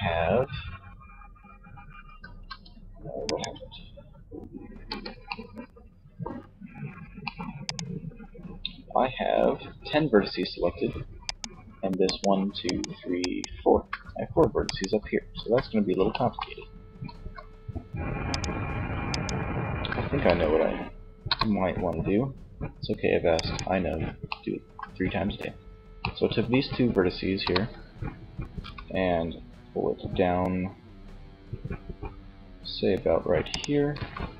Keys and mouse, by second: 3.8 c, 6.8-9.1 right drag, 10.5-15.6 right drag, 15.7-20.2 middle drag, 20.2 KP_3, 23.7 middle click, 26.3 KP_3, 28.0 e, 32.9-34.3 drag, 33.2 e.